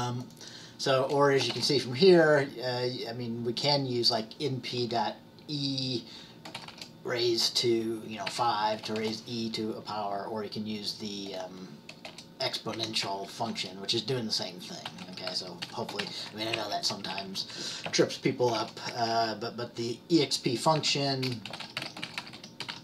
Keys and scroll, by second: 6.6 typing, 8.1-8.8 typing, 10.0 typing, 12.8 Up, 13.5 typing, 14.6-17.5 typing, 16.6 Right, 17.1 Right, 17.3 Right, 18.9-22.8 typing.